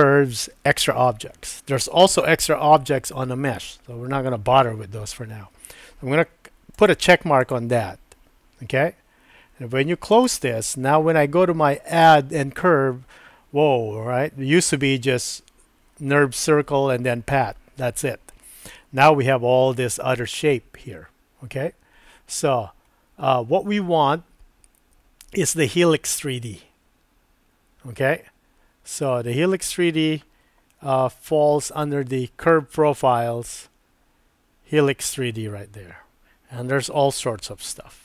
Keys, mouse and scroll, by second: 12.0-38.0 drag.